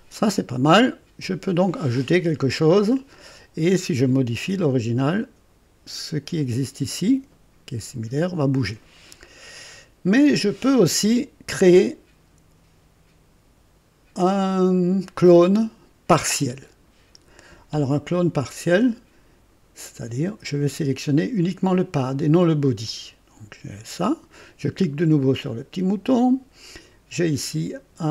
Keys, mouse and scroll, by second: 0.2 right click, 9.3 scroll down 2, 14.2 click, 19.8 click, 22.8 click, 26.0 click.